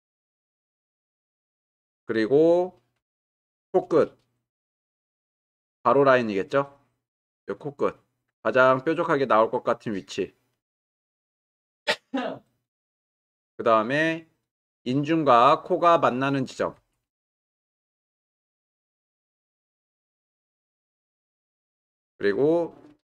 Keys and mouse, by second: 5.1 ctrl+r, 9.9-13.7 drag, 16.8 ctrl+r, 20.2 click.